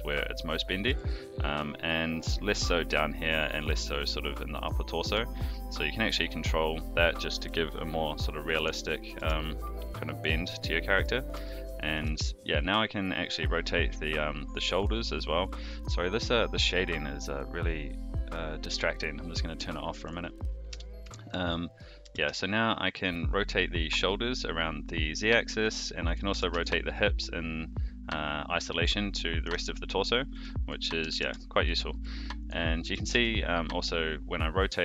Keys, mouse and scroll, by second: 0.8 r, 5.0 r, 9.1 alt+r, 10.0-11.0 middle drag, 11.4 shift+middle click, 11.9 r, 18.1 click, 19.7 shift+middle click, 20.7 n, 21.1 shift+middle drag, 21.3-21.8 shift+scroll down 2, 21.5 middle drag, 22.0 r, 26.0 click, 26.3 r, 30.3 a, 31.0 alt+g, 31.2 alt+r, 31.6-32.0 middle drag, 32.4 click, 32.8 r.